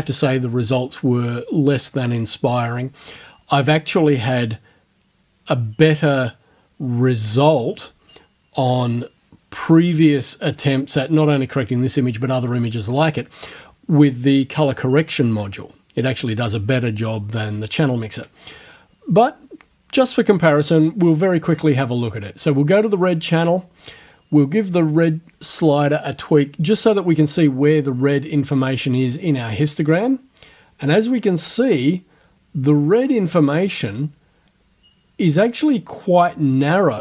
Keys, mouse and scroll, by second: 22.0 scroll up 1, 29.7-37.0 drag.